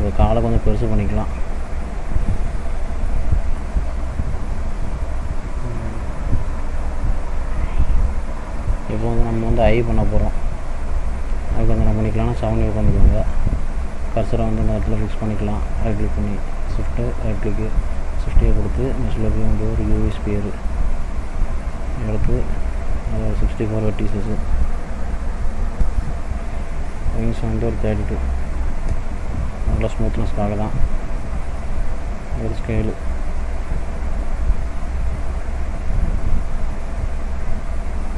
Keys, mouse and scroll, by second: 0.5 s, 3.1 middle click, 4.0 click, 5.2-5.7 scroll down 2, 5.7 middle click, 6.1-7.1 scroll up 2, 8.8 middle click, 9.3 shift+middle click, 10.0 middle click, 10.9 shift+middle click, 12.1 KP_7, 14.4 shift+click, 15.5 shift+right click, 17.8 shift+a, 23.1 click, 27.1 click, 29.8 middle click, 31.1 d, 32.4 s, 35.3 click, 36.5 click.